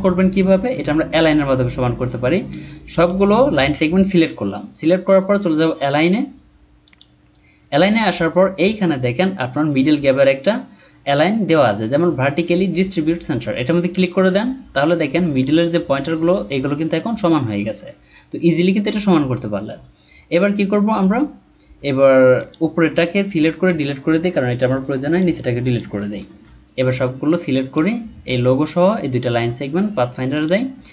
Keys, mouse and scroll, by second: 0.5-1.0 ctrl+scroll down 1, 24.6 BackSpace, 26.0 BackSpace.